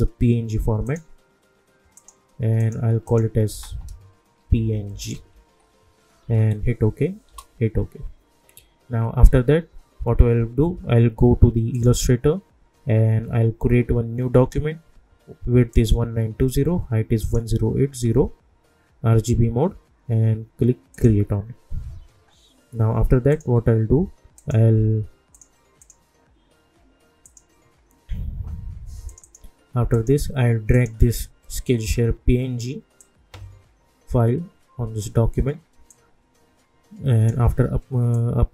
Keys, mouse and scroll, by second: 0.8 click, 3.5-5.6 typing, 6.2 Return, 11.7 click, 15.7 click, 20.9 click, 23.3 click, 24.6 click, 33.0-38.5 drag.